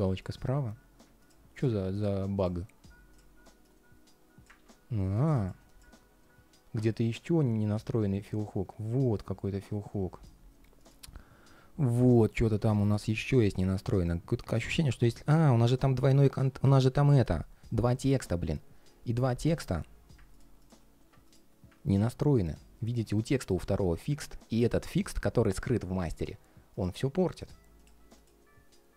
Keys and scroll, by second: 4.3 super+z.